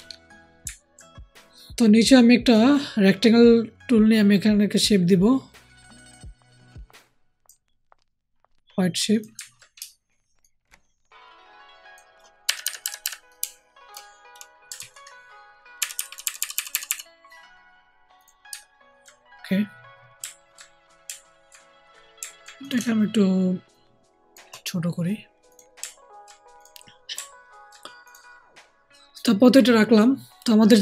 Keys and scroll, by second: 12.4 alt+shift+Up, 12.5 alt+shift+Up, 12.7 alt+shift+Up, 12.9 alt+shift+Up, 14.7 ctrl+z, 15.7 Right, 15.9 Right, 16.0 Right, 16.1 Right, 16.3 Right, 16.4 Right, 16.6 Right, 16.8 Right.